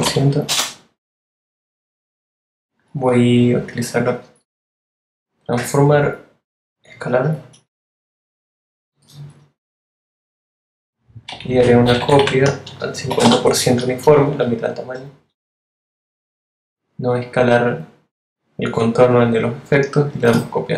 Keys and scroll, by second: 10.7 Right, 11.0 shift+Left, 12.1-12.9 typing.